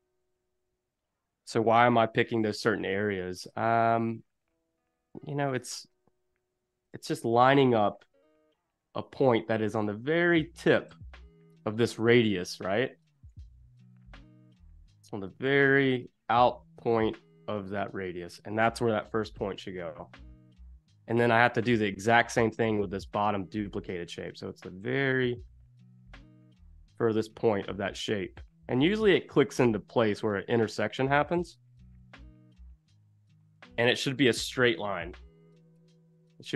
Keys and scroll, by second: 2.2 super+y, 3.0 a, 5.5 super+y, 6.7 shift+super+], 10.9 z, 12.8 a, 13.6 super+y, 19.1 super+-, 20.4 space, 21.9 z, 22.8 a, 34.4 super+-, 35.8 space.